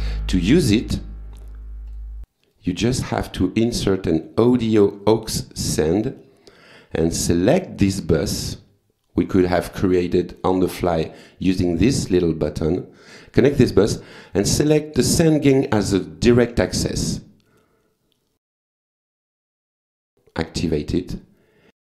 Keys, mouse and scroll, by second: 0.0 click, 0.8 right click, 1.9 click, 2.4 right click, 5.0 click, 7.3 click, 9.3 click, 14.3 click, 15.8 click, 18.4 click, 20.0 click, 21.4-21.8 scroll down 2.